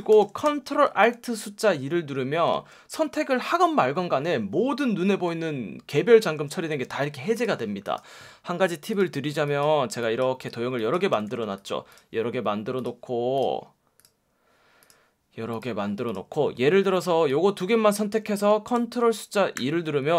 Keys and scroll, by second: 6.3 alt+super+2, 7.7 space, 11.1 v, 19.6 super+2.